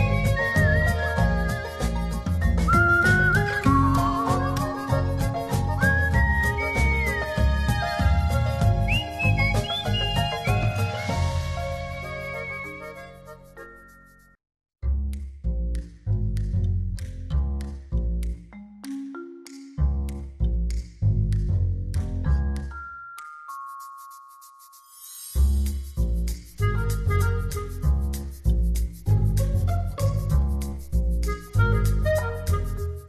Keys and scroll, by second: 1.1 shift+Right, 23.8 shift+super+z, 24.6 shift+super+z.